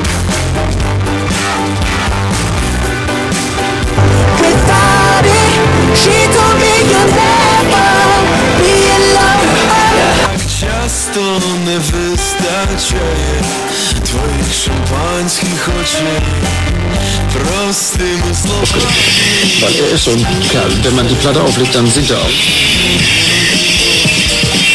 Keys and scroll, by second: 10.3 Page_Down.